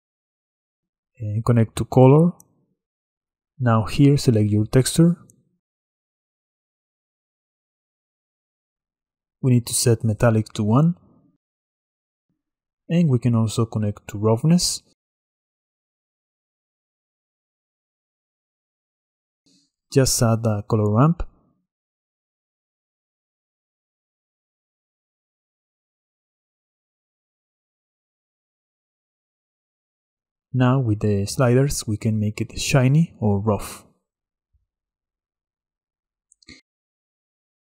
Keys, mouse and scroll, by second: 0.4 middle click, 0.6 drag, 2.6-5.6 drag, 8.6 middle click, 8.8-10.0 scroll up 6, 10.8 click, 15.1 scroll down 2, 16.0 click, 20.6 shift+a, 26.9-29.9 middle drag, 30.0 click, 31.0-31.7 scroll up 3, 31.7-34.2 drag, 34.5-37.7 drag.